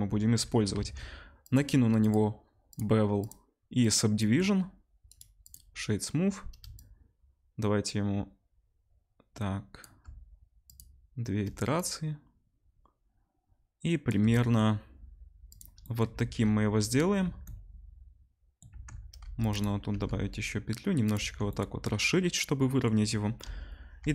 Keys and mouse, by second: 0.7 Tab, 1.4 click, 1.5-2.0 middle drag, 2.0-19.5 drag, 5.1-24.1 middle drag, 5.1-19.5 right drag, 16.1 Tab, 17.2 Tab, 18.7 Tab, 19.2 ctrl+r, 19.9 ctrl+b, 21.1 Tab, 23.4 KP_0, 24.0 r.